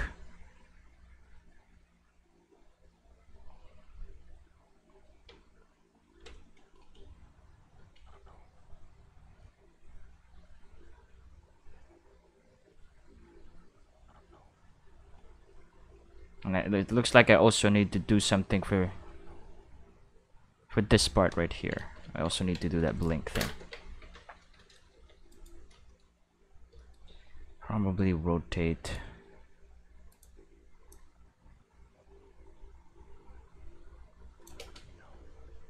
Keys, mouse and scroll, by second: 0.9 click, 2.2 click, 5.8 ctrl+middle click, 6.7 click, 7.0 space, 7.8 space, 7.9 click, 8.1 space, 9.3 space, 9.4-13.9 drag, 14.1 space, 15.1 space, 15.2-18.9 drag, 19.1 space, 19.9 space, 20.1-20.8 drag, 21.6 ctrl+middle click, 21.9 middle click, 22.2 ctrl+middle click, 23.6 Tab, 23.9 a, 24.7 shift+middle click, 24.9 g, 25.3 right click, 25.6 middle click, 27.7 r, 28.8 right click, 30.1 right click, 30.9-34.4 drag, 34.6 space.